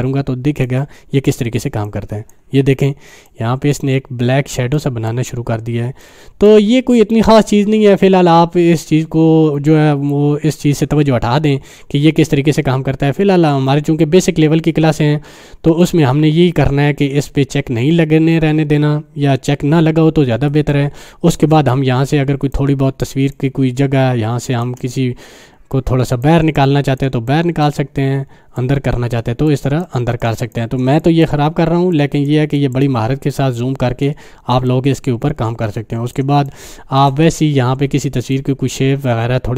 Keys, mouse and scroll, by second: 1.8-2.4 drag, 5.0-5.4 click, 6.3 click, 15.7 click, 16.5 click, 20.5 space, 20.7 click, 21.0 space, 22.7-23.1 click, 22.9 space, 23.3 click, 23.4-24.9 space, 25.7-26.3 drag, 34.5 space, 34.7-36.2 click, 35.0 space, 36.4 click, 36.6-37.1 space, 38.6-39.5 drag.